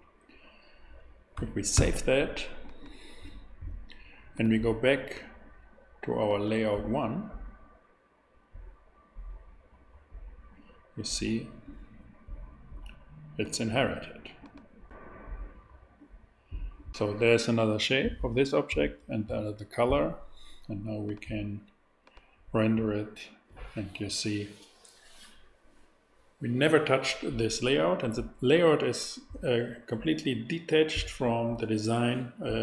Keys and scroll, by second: 1.7 super+s.